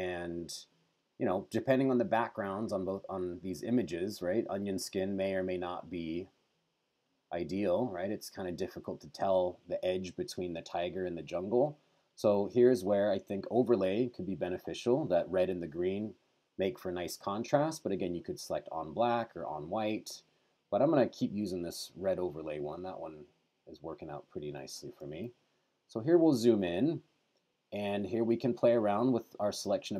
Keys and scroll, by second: 25.3 super+=.